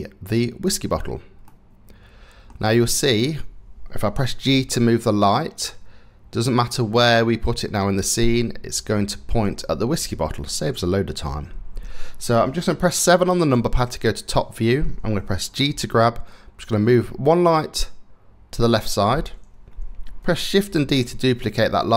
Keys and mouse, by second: 1.1-2.1 drag, 4.0 middle click, 4.0 g, 13.1 KP_7, 15.3 g, 20.3 shift+d.